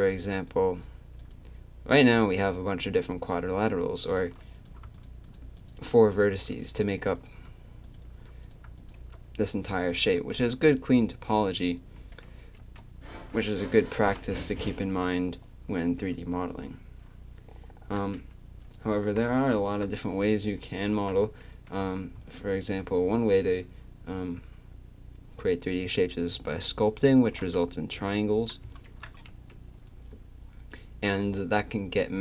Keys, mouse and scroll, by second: 0.4 click, 10.1 Tab, 12.6 Tab, 13.1 a, 18.6-21.3 drag, 22.2 a, 27.7 Tab, 29.3 Tab.